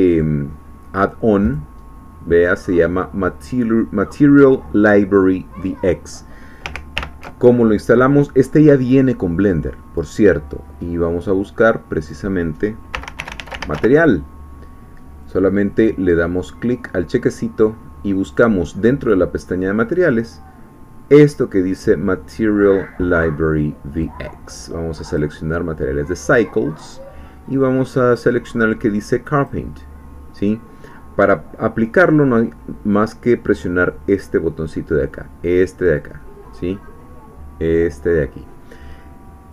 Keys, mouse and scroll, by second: 0.1-1.9 drag, 1.9-5.7 scroll down 2, 5.7-6.6 scroll down 1, 6.9 ctrl+alt+u, 8.8-10.2 drag, 12.0 click, 12.9-13.8 typing, 15.2 click, 18.3 click, 23.9 click, 25.1 click, 27.6-28.6 scroll down 2, 29.4 click, 35.9 click.